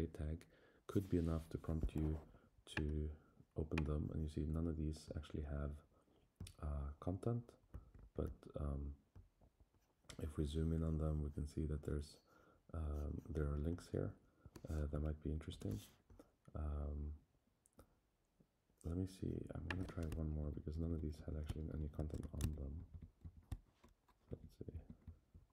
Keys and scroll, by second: 15.5 super+[, 20.4 shift+Down, 21.7 Left, 22.5 shift+Down, 24.3 Down, 25.0 Up.